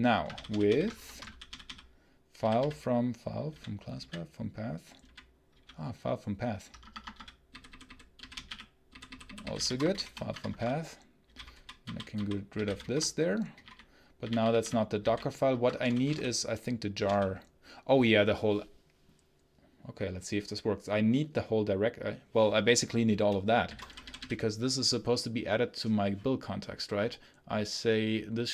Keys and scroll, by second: 0.2 Right, 0.8 ctrl+space, 1.1 Right, 2.2 Down, 2.5 Down, 3.3 Down, 3.8 Down, 4.9 Down, 5.4 Up, 6.7 Escape, 7.0-17.0 typing, 10.3 Escape, 23.3-24.2 typing.